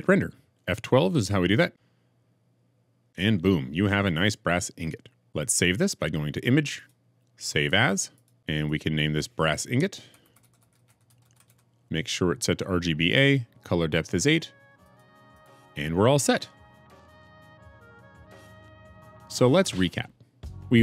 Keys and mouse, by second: 1.7 F12.